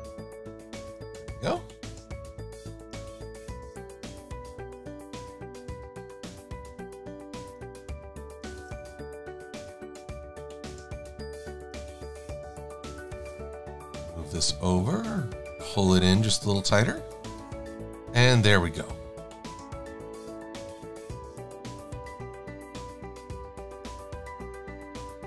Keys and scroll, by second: 9.2 Caps_Lock, 9.2 Right, 18.3 shift+x.